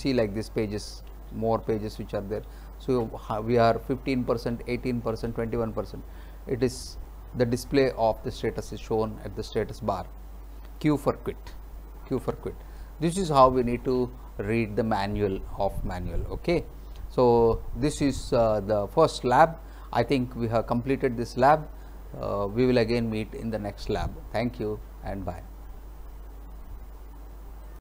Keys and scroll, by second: 1.2 space, 12.2 q.